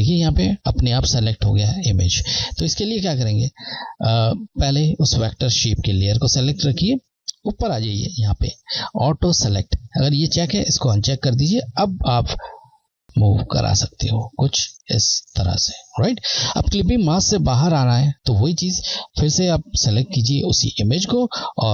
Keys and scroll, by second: 2.9 typing, 4.0 Left, 10.9 Left, 18.9 Left.